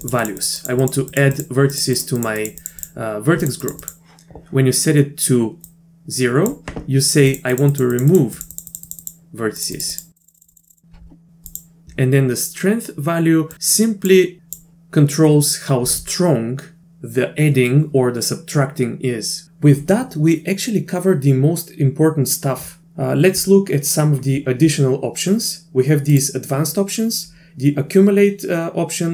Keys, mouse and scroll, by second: 0.0 click, 0.2 click, 0.4 click, 0.6 click, 0.8 click, 1.1 click, 1.3 click, 1.7 click, 1.9 click, 2.1 click, 2.4 click, 2.6 click, 2.8 click, 3.4 click, 3.6 click, 3.8 click, 5.8 click, 7.3 click, 7.5 click, 7.7 click, 7.9 click, 8.1 click, 8.4 click, 8.5 click, 8.7 click, 8.8 click, 9.0 click, 9.6 click, 9.7 click, 9.9 click, 10.2 click, 10.2 click, 10.4 click, 10.4 click, 10.5 click, 10.7 click, 11.8 ctrl+z, 13.5 click, 14.4 click.